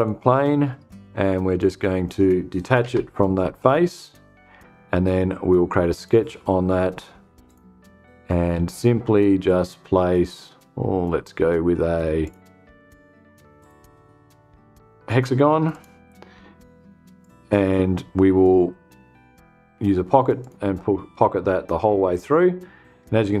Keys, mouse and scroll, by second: 1.0-1.7 drag, 2.3 BackSpace, 3.4 click, 5.4 click, 6.9 click, 11.7 click, 13.1 click, 15.2 click, 16.7 click, 19.9 click.